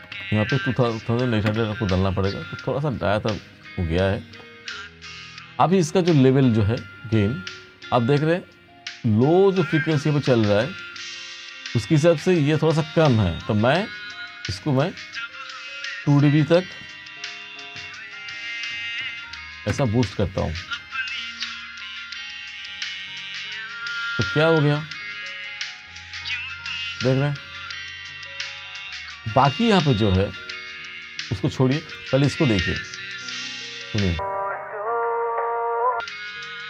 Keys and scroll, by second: 0.2 0, 1.6 Return, 17.8 2, 18.8 ., 19.1 0, 19.8 Return.